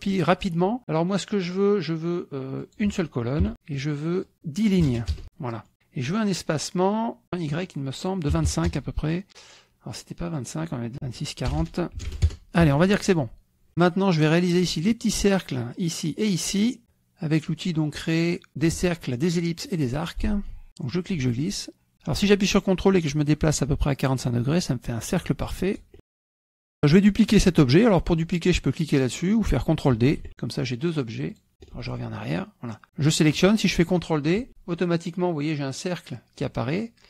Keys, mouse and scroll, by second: 2.6 click, 3.4 KP_1, 3.8 click, 4.8 KP_1, 5.1 KP_Enter, 5.7 click, 7.2 click, 8.3 KP_5, 8.5 KP_Enter, 10.2 click, 10.9 click, 11.4 BackSpace, 11.8 KP_4, 12.1 KP_Enter, 13.7 click, 19.4 click, 19.9 click, 20.8-25.8 ctrl+drag, 26.4 click, 26.8 click, 30.0 ctrl+d, 31.2 click, 31.6 ctrl+z, 32.8 click, 34.4 ctrl+d.